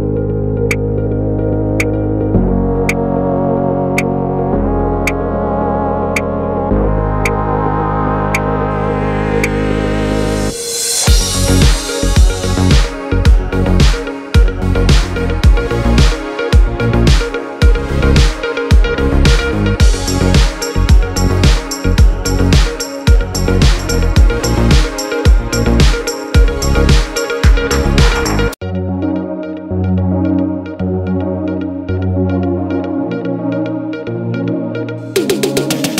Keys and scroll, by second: 3.5 x, 27.4 x.